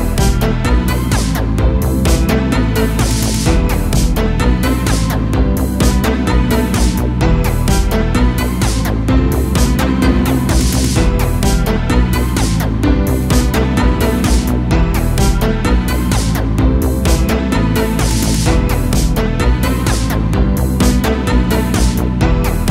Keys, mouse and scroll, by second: 3.5-4.2 scroll down 1, 4.2 KP_7, 5.0 s, 7.8 Tab, 8.6 a, 8.8 a, 9.5 Tab, 10.3 Tab, 10.6 a, 11.3 e, 14.8 middle click, 15.8-16.5 scroll up 1, 16.5 g, 18.6 a, 18.8 a, 19.3 click, 19.4 click, 20.0 f, 20.4 a, 20.6 a, 21.5 3, 21.9 click.